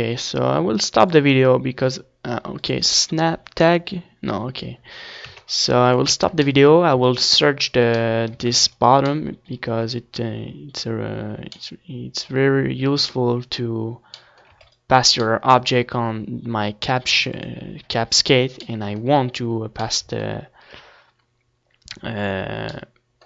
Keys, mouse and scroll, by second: 0.4-4.0 drag, 4.6-7.8 middle drag, 4.8 Tab, 5.3 ctrl+s, 7.9 a, 8.1 ctrl+s, 14.2 ctrl+s, 16.9 ctrl+s.